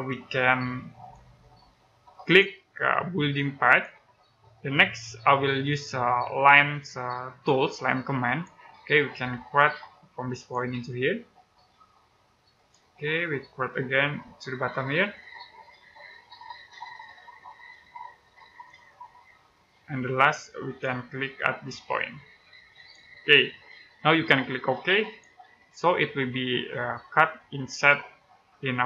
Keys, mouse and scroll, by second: 0.9 click, 8.1 click, 9.0-10.3 scroll up 1, 10.3 click, 12.8 scroll down 1, 13.1 middle click, 14.9 click, 26.4 shift+middle click.